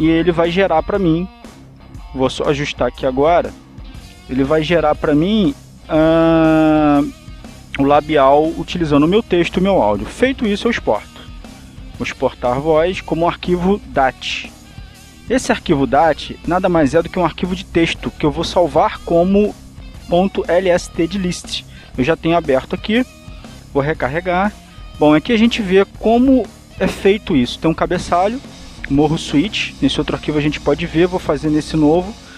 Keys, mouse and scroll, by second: 0.7 click, 3.6-4.6 drag, 4.8-7.2 drag, 8.1 click, 13.7 click, 15.0 click, 15.9 click, 16.7 click, 23.6 click, 25.7 click, 28.9 click, 31.9 click.